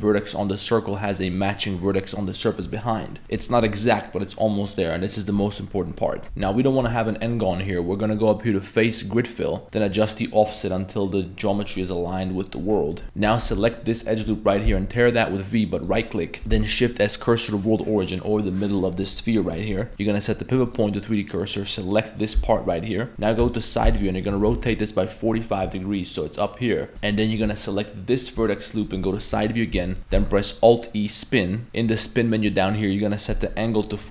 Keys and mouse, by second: 6.2 2, 6.2 x, 6.2 1, 8.2-8.9 drag, 9.9 click, 10.4 click, 11.1 middle click, 12.1 middle click, 12.9 middle click, 13.0 Tab, 13.0 p, 13.3 1, 13.9 alt+right click, 14.7 v, 16.2 middle click, 16.4 ctrl+z, 16.4 a, 16.6 shift+s, 17.5 middle click, 19.9 a, 20.0-20.7 drag, 21.1-21.4 middle drag, 22.4 l, 22.7 middle click, 23.1 r, 23.4 KP_3, 23.8 r, 26.7 middle drag, 26.9 z, 28.4-28.8 middle drag, 29.3 KP_3, 29.8 z, 30.2 alt+e, 32.5 click, 33.2-34.1 drag.